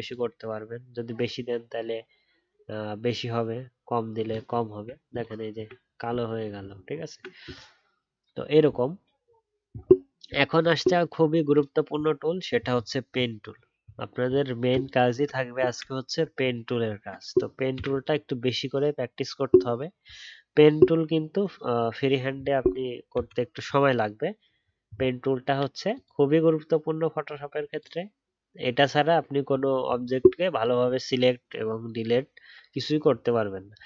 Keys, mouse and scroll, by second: 4.8 alt+scroll up 3, 4.8 alt+scroll down 1, 6.2 alt+scroll up 1, 6.6 alt+scroll down 1, 6.8-9.9 alt+scroll up 1, 12.7 alt+scroll down 1, 13.5-14.9 alt+scroll down 1, 16.4 alt+scroll down 1, 16.8 alt+scroll up 1.